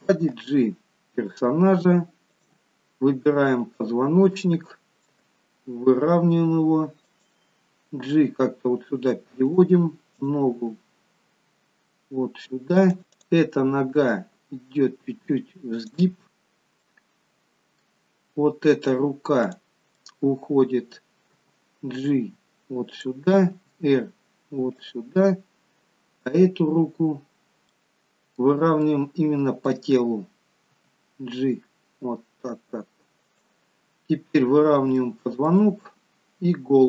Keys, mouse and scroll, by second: 0.4 g, 3.6 click, 5.3 g, 8.3 g, 10.3 click, 10.8 g, 13.2 click, 14.0 g, 16.8 middle click, 19.5 click, 20.1 middle click, 21.5 g, 23.7 r, 27.9 middle click, 29.0 middle click, 30.8 g, 34.2-34.8 scroll up 2, 34.8 scroll down 1, 35.1 shift+middle click.